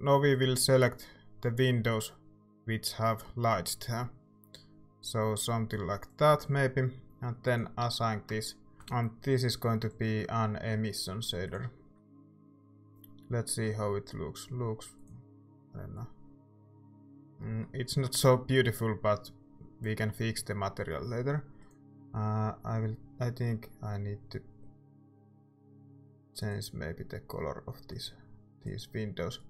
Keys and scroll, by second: 8.3 Tab, 8.7 ctrl+s, 12.5 z.